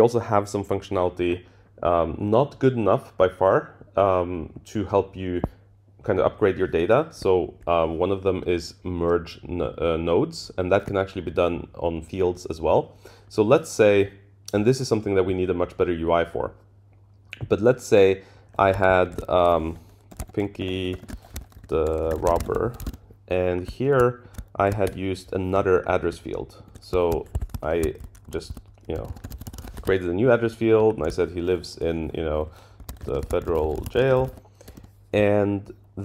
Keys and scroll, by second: 19.3 shift+super+Left, 24.2 Up, 24.6 shift+Down, 26.6 super+Right, 27.3 Tab, 29.8 Escape.